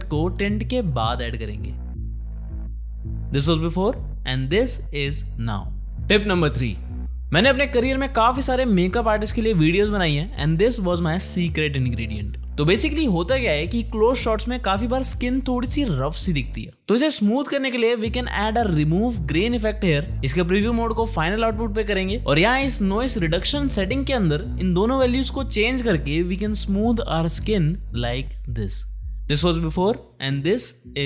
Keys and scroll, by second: 7.1 Home, 7.4 space, 12.1 space, 16.9 ctrl+space, 17.6-18.6 typing, 18.9 Return.